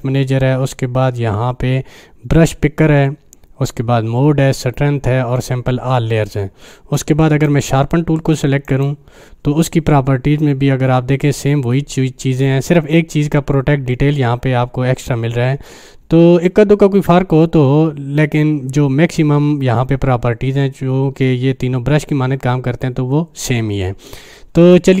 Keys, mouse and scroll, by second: 7.0-7.6 drag, 24.7-25.0 drag.